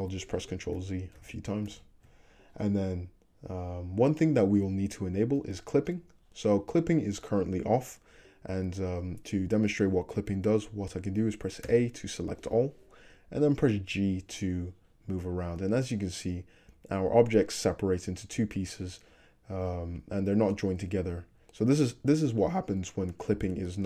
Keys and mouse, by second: 0.8 ctrl+z, 1.2 ctrl+z, 1.7 ctrl+z, 11.8 a, 13.7 g, 15.6-23.8 middle drag.